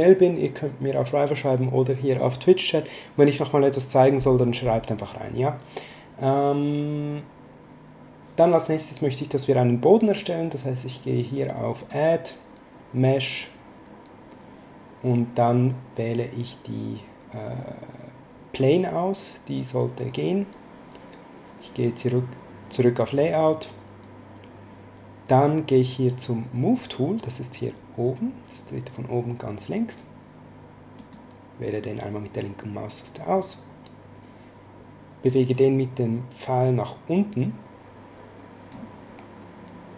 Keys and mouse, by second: 11.8 click, 18.6 click, 23.1 click, 30.9 click, 35.5 click.